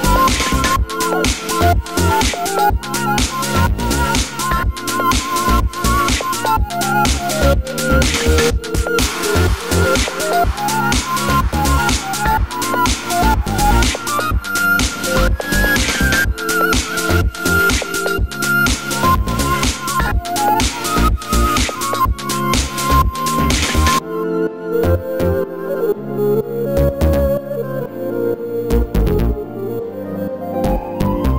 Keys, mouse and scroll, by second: 0.8-2.6 middle drag, 2.6 click, 2.9 h, 3.1-4.8 middle drag, 4.8 click, 5.0 r, 5.9 drag, 6.0-7.2 middle drag, 7.2 click, 7.9-9.4 middle drag, 8.3 r, 9.4-9.9 scroll up 2, 9.9 click, 11.4-13.6 middle drag, 11.6 scroll down 2, 12.0 r, 13.6 click, 13.8-15.0 middle drag, 14.1 alt+h, 15.0 shift+click, 15.5 ctrl+j, 15.9-23.9 middle drag, 17.7 ctrl+z, 20.0 ctrl+z, 21.6 g, 23.4 r, 23.9 click, 24.0-26.9 middle drag, 25.5 alt+h, 26.9 shift+click, 27.3 ctrl+j, 27.4-28.1 middle drag, 27.8 scroll down 1, 28.1 click, 30.2-31.3 middle drag, 30.9 scroll down 2.